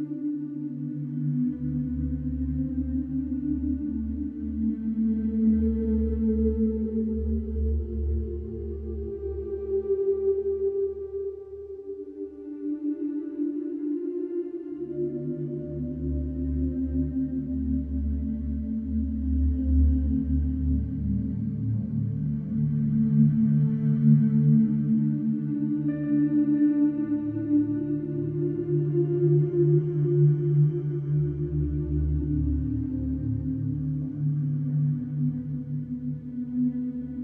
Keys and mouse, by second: 1.6 s, 1.7 shift+z, 3.8 middle click, 5.9-6.6 middle drag, 8.7 KP_7, 9.3 KP_7, 14.1-14.6 middle drag, 14.6 ctrl+s, 16.4 middle click, 16.9-18.2 middle drag, 18.4 shift+middle click, 19.4 middle drag, 20.0 shift+middle drag, 26.7-28.1 middle drag, 29.5-30.0 middle drag, 31.9 shift+middle click.